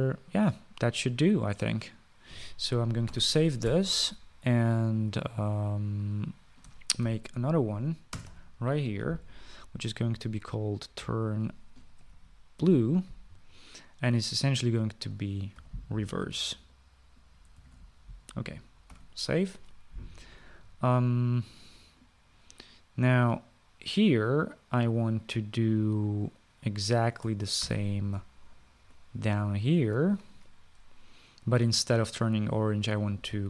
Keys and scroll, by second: 3.9 ctrl+s, 7.9 ctrl+c, 9.0 Return, 9.1 ctrl+v, 12.4-14.0 typing, 16.4 -, 19.7 ctrl+s, 28.4 ctrl+c.